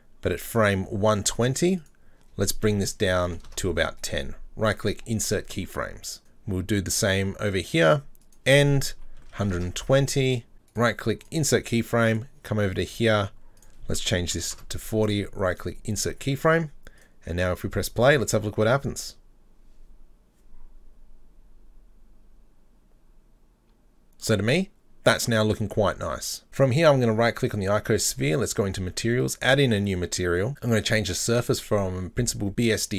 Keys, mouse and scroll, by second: 4.0-6.2 right drag, 6.2 click, 8.3-10.5 drag, 10.7-12.1 right drag, 12.1 click, 13.6-15.1 drag, 15.1-17.0 right drag, 17.0 click, 17.7 click, 24.1 click, 26.6 right click, 28.5 click, 29.2-30.5 drag, 31.2-32.6 drag.